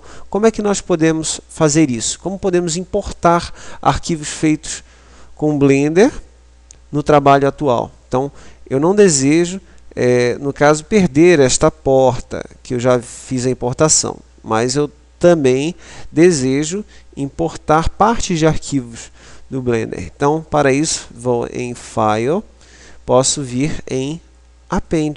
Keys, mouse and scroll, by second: 20.4 click.